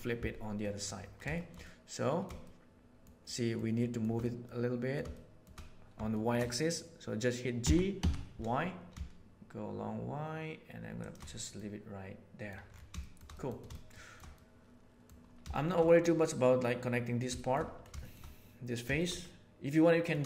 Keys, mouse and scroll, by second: 0.6 middle click, 1.3 shift+middle click, 1.6-2.9 middle drag, 3.1 shift+middle click, 3.7 shift+middle click, 4.3 middle click, 5.1 shift+middle click, 6.1 shift+middle click, 7.6 g, 11.4-12.4 middle drag, 13.3 middle click, 13.8 shift+middle click, 14.4 middle click, 15.5 shift+middle click, 15.8 middle click, 17.2 shift+middle click, 18.0 shift+middle click, 18.9 shift+middle click, 19.2 middle click.